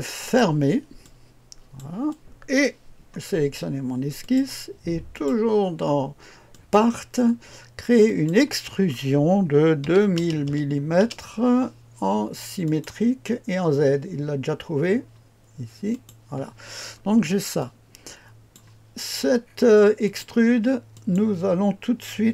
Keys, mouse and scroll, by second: 0.2 click, 5.1 click, 6.5 click, 8.0 click, 9.8 KP_2, 10.1 KP_0, 10.4 KP_0, 11.0 KP_0, 12.6 click, 15.9 click, 16.9-17.6 scroll down 1, 17.6-18.7 drag, 19.1 scroll down 2, 20.0 click, 20.9 click, 21.7 click.